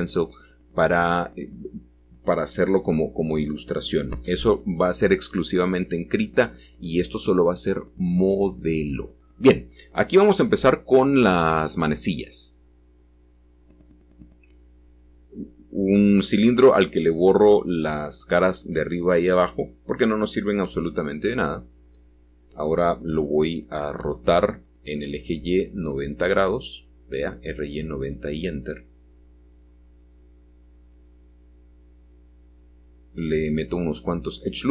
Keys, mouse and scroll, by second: 0.0-2.5 scroll down 2, 2.5-7.1 drag, 2.5 middle click, 2.9 middle click, 5.0 shift+middle click, 7.3-8.4 drag, 13.7-18.4 drag, 19.8-20.9 drag, 21.1 g, 22.4-23.5 drag, 24.5 r, 28.4-29.2 scroll up 1.